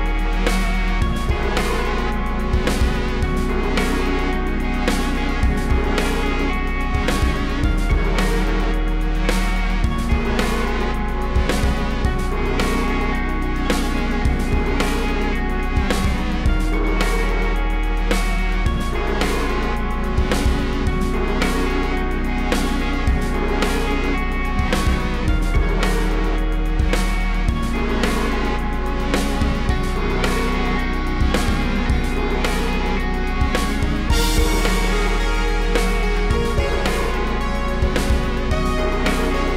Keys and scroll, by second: 3.2 a, 4.9 v, 5.4 BackSpace, 6.2 z, 6.6 a, 8.0 v, 8.6 a, 9.5 super+z, 9.9 v, 10.4 BackSpace, 10.7 super+z, 12.5-14.9 typing, 16.7 v, 17.2 BackSpace, 21.0 m, 22.4 v, 24.6-26.0 typing, 26.1 super+c, 26.2 super+v, 27.3 x, 29.4 v, 29.8 v, 30.2 super+g, 30.6 shift+super+[, 30.7 super+], 31.0 z, 31.4 p, 32.7 typing, 34.7 super+c, 34.8 super+v, 36.0 super+c, 36.1 super+v, 37.2 super+c, 37.3 super+v, 38.8 super+c, 39.1 super+v.